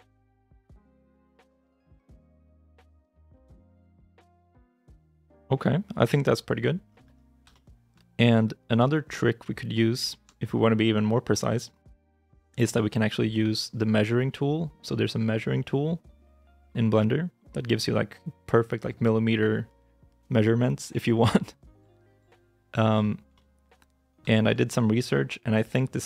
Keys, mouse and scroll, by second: 0.1 shift+middle click, 0.4 middle click, 1.0 scroll down 1, 1.1 scroll up 1, 1.4 middle click, 1.8 g, 2.2 shift+click, 2.5 middle click, 6.7 scroll down 1, 7.3 shift+scroll down 1, 7.4 shift+middle click, 8.7 shift+middle click, 9.3 shift+middle click, 9.9 shift+middle click, 12.2 middle click, 22.9 shift+middle click, 23.2 shift+middle click, 23.7 scroll down 1, 24.2 shift+middle click.